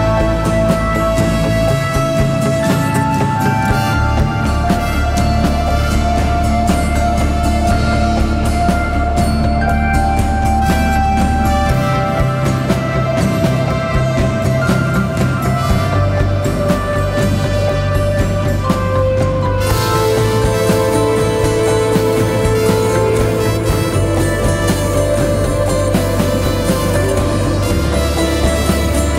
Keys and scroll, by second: 0.3 4, 6.5 3, 7.8 ,, 11.5 ], 13.8 ], 15.0 ], 16.5-17.5 typing, 21.1 ctrl+d, 21.2 Escape, 23.6 ], 25.6 4.